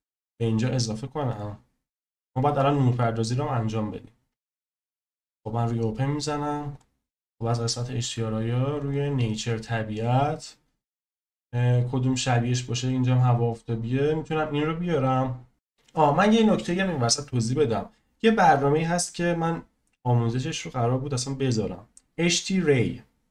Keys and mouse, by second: 1.3-4.8 drag, 6.7 click.